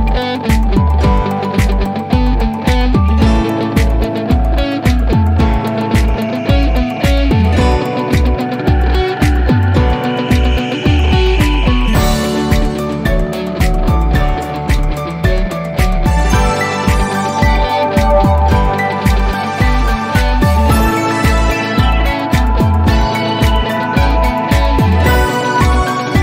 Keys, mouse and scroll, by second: 25.2 click.